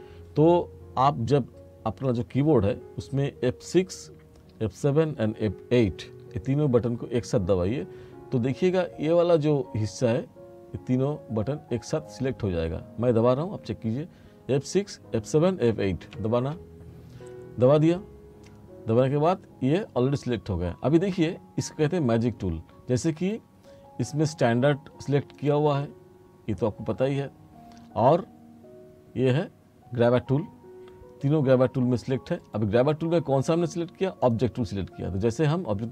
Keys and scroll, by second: 16.2 F6, 16.7 F8.